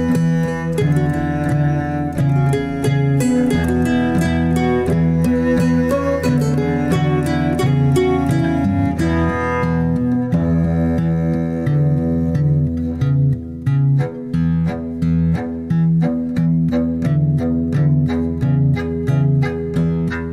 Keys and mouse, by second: 0.5-0.9 shift+middle drag, 1.5 click, 13.3 Tab, 15.9 Tab, 16.8 click, 17.1 g.